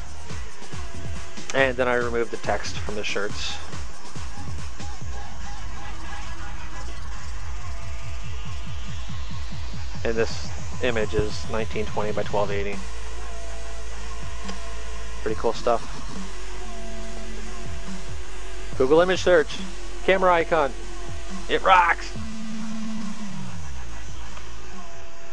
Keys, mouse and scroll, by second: 2.0 click, 7.0 click, 8.2 click, 15.2 click, 16.4 click, 19.3 click, 21.7 click.